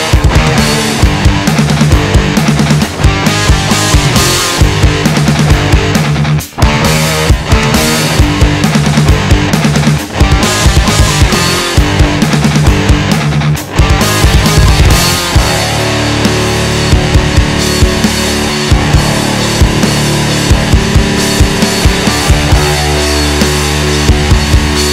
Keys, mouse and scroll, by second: 0.3 click, 1.3 KP_1, 2.0 shift+middle click, 2.5-3.5 scroll up 2, 3.5-4.2 shift+middle drag, 4.2 Tab, 4.5-5.0 middle drag, 5.0 alt+z, 5.3-6.5 middle drag, 6.5 KP_3, 7.3 Tab, 8.3-9.5 scroll down 1, 9.5 alt+z, 10.5 Tab, 11.0 click, 14.1 click, 20.4 middle click, 21.1 ctrl+r, 22.5 KP_3.